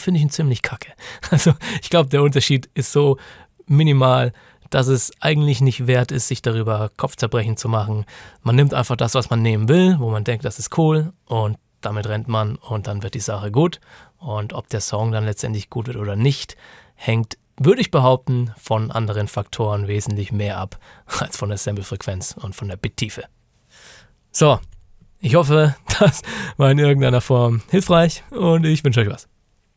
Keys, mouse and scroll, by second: 23.7 click.